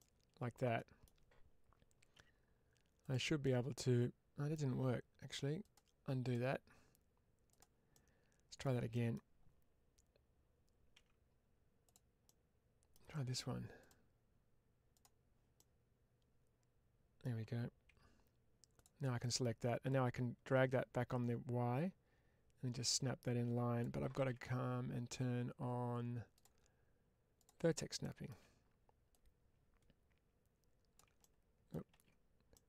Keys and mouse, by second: 2.0 1, 2.9 click, 3.3-4.4 middle drag, 5.5 click, 6.1-7.5 drag, 7.8 middle click, 8.8 middle click, 10.9 2, 12.1 middle click, 13.7-15.3 drag, 15.4-17.1 middle drag, 17.8 1, 19.1 middle click, 19.8-23.7 drag, 24.1 ctrl+z, 29.0-30.8 drag, 31.1 middle click, 31.8 ctrl+z, 32.4 middle click.